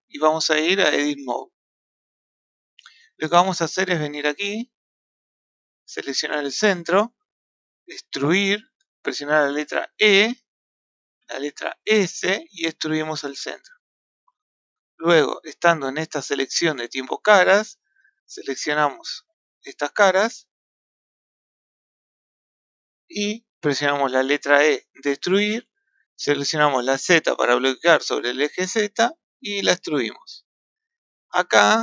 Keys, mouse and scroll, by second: 5.1 click, 6.3 click, 8.5 e, 14.5-17.5 middle drag, 18.0 click, 19.4 shift+click, 20.9 shift+click, 21.6 shift+click, 22.3 shift+click, 23.0-24.4 middle drag, 24.4 e.